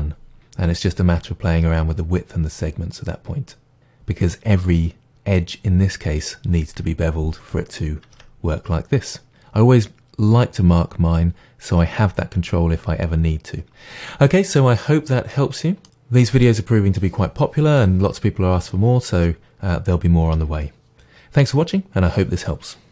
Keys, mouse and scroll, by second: 8.2 Tab, 13.7 ctrl+z, 14.4-14.9 scroll down 1, 14.9-15.5 middle drag, 15.8-22.9 middle drag.